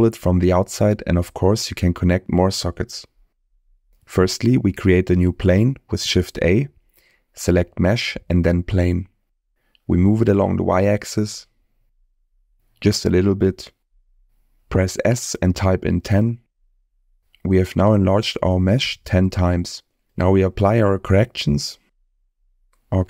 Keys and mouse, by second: 3.3-3.7 middle drag, 4.0 middle click, 4.7 shift+middle drag, 6.3 shift+a, 9.0 g, 10.9 y, 14.6 s, 16.6 1, 16.9 0, 17.1 Return, 19.9-22.7 drag.